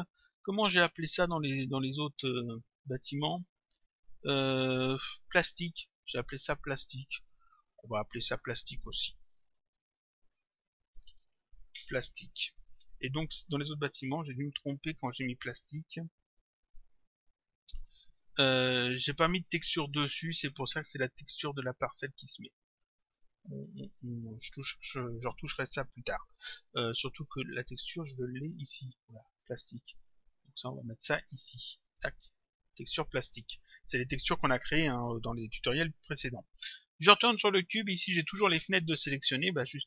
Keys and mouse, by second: 2.3 click, 6.4 click, 8.1 click, 9.2-11.6 typing, 11.8 Return, 14.1 click, 15.5 click, 18.7 click, 23.0 click, 27.7 click, 29.3 click, 33.5 click, 37.4 click.